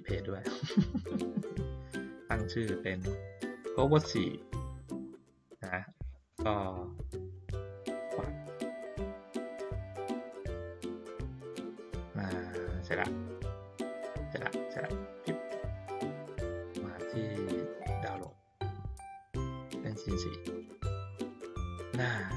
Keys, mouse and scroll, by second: 2.3 click, 8.0 click, 14.8 click, 18.1 click, 19.7 click, 19.8 click.